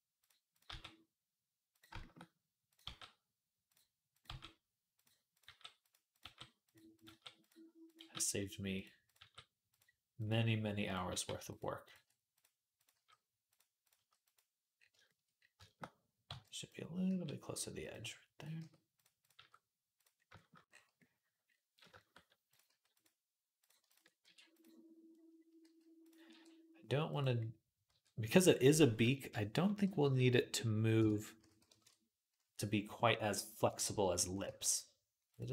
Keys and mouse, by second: 0.5 g, 2.5 click, 2.7 g, 3.9 click, 4.0-5.1 middle drag, 4.1 g, 5.1 click, 5.2-7.7 middle drag, 5.3 g, 6.1 g, 6.9 g, 7.7 click, 7.8-10.0 middle drag, 7.8 g, 9.0 g, 10.0 click, 10.1-11.6 middle drag, 11.0 g, 11.6 click, 11.7-23.4 middle drag, 12.7 g, 13.8 g, 16.1 b, 16.9 g, 18.4 g, 19.2 g, 22.5 g, 23.4 click, 23.5-35.5 ctrl+middle drag, 24.1 e, 25.5 g, 26.1 r, 27.7 e, 28.8 /, 29.6 /, 29.8 ., 31.2 s, 34.3 g, 35.4 s.